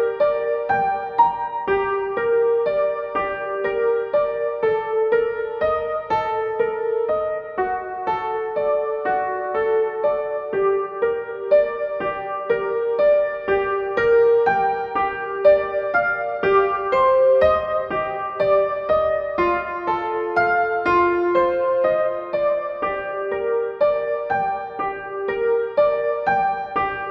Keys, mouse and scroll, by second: 1.4 click, 7.4-10.3 drag, 15.4 click, 20.9-27.1 drag.